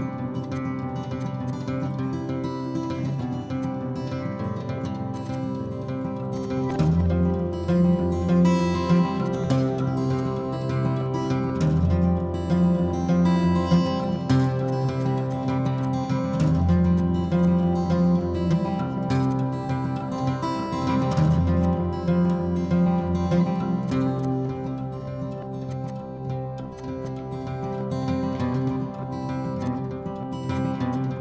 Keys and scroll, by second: 0.5-2.9 typing, 4.0-5.1 typing, 6.1 ctrl+g, 6.6 e, 7.1 Escape, 9.0 Delete, 9.7 f, 11.0-11.3 typing, 12.4-13.6 typing, 14.9 e, 16.9 p, 17.6 Escape, 20.0 l, 21.3-25.7 typing, 28.5 Escape.